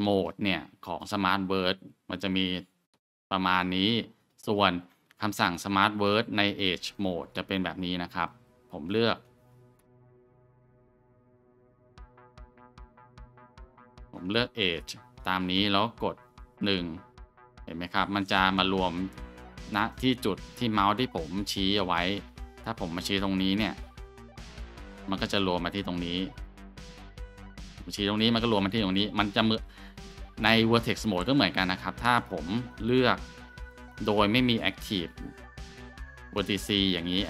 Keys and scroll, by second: 2.8-4.1 scroll, 4.5 Tab, 14.8 scroll, 17.2 shift+1, 22.3 ctrl+z, 24.4 1, 25.6 ctrl+z, 27.7 1, 28.6 ctrl+z, 29.2 Tab.